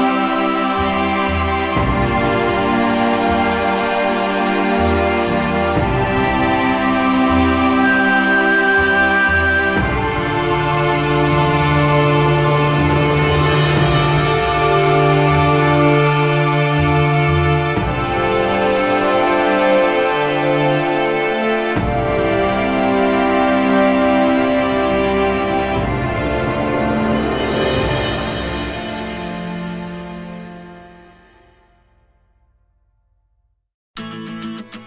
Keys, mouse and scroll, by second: 2.5 click, 3.5 middle click, 4.4 alt+middle click, 5.1 middle click, 5.8 ctrl+f, 6.4 ctrl+z, 7.2 alt+middle click, 7.5 click, 8.9 alt+middle click, 10.2 click, 10.8 ctrl+h, 11.8 alt+middle click, 12.3 alt+middle click, 13.8 right click, 14.9 alt+middle click, 15.4 alt+middle click, 17.1 click, 18.8 alt+middle click, 21.5 click, 23.0 alt+middle click, 23.6 ctrl+z, 23.8 ctrl+z, 23.8-24.9 alt+scroll, 24.2 ctrl+z, 24.2 ctrl+z, 24.9 ctrl+z, 25.2 ctrl+z, 25.3 ctrl+z, 25.5 ctrl+z, 25.6 ctrl+z, 25.8 ctrl+z, 26.0 ctrl+z, 26.8-27.2 scroll, 27.9 alt+scroll, 28.1 click, 29.5 click, 30.3 ctrl+k, 30.7 click, 31.1 alt+middle click, 32.2 click, 33.3 ctrl+k, 34.0 alt+middle click.